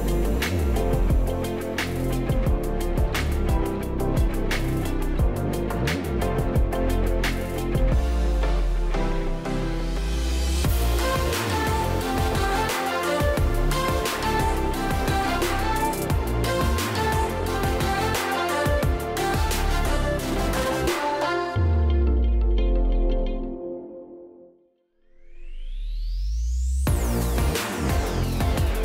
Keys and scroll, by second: 2.9 space, 8.4-9.1 space, 11.1 space, 15.1 space, 25.8 space.